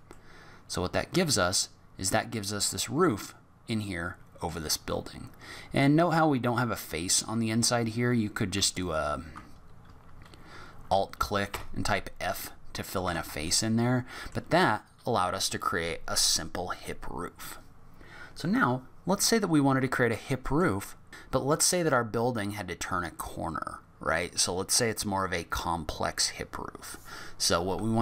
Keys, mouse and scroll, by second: 0.1 middle click, 5.0 middle click, 8.7 alt+click, 11.5 f, 12.2 middle click, 13.0 Tab, 13.5 middle click, 19.2 middle click.